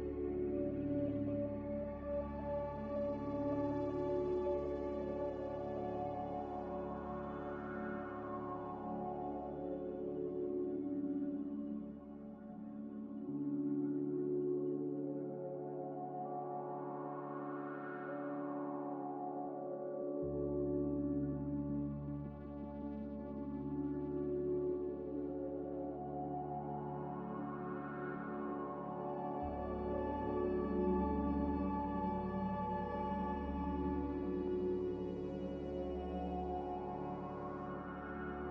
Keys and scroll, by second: 0.0-0.7 typing, 4.0-4.9 typing, 9.4-10.2 typing.